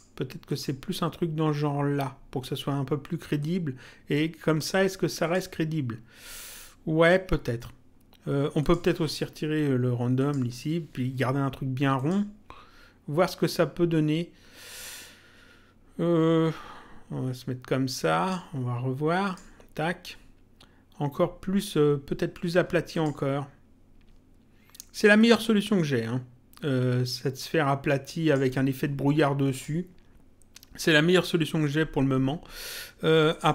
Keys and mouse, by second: 0.5 click, 3.4 click, 5.2 click, 8.6 click, 10.1 click, 10.5 Delete, 11.9 click, 14.6 click, 19.2 click, 22.9 click, 25.1 click, 29.5 click, 33.2 click.